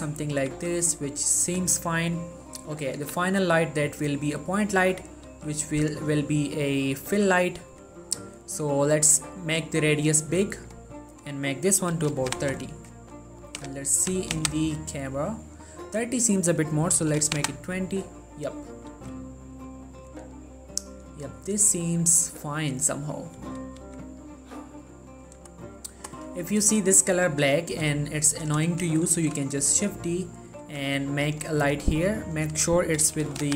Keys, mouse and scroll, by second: 0.7 g, 1.2-3.0 drag, 3.2 shift+a, 4.4-5.0 drag, 5.0 1, 5.4 g, 6.0-6.4 drag, 6.4 middle click, 7.2 g, 7.9 click, 8.2-8.6 scroll up 1, 9.4-11.3 drag, 16.5 click, 19.1 g, 20.2 click, 23.9 g, 25.3 right click, 27.4 3, 27.9 3, 29.4 shift+d, 29.9 click, 30.2 middle click, 30.4-30.8 scroll down 2, 30.8 g, 31.4-32.4 drag.